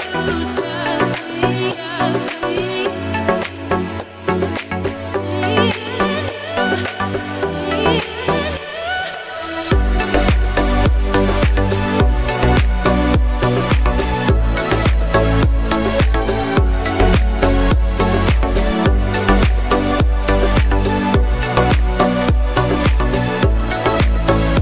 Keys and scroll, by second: 23.0 ctrl+g.